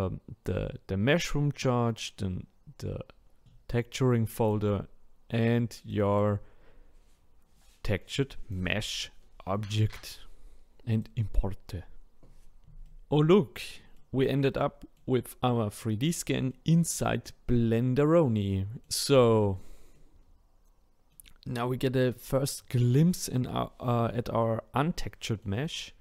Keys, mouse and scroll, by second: 12.9-15.7 middle drag, 15.7-16.5 scroll up 2, 16.5-19.1 middle drag, 19.1-19.9 scroll up 6, 19.9-26.0 middle drag.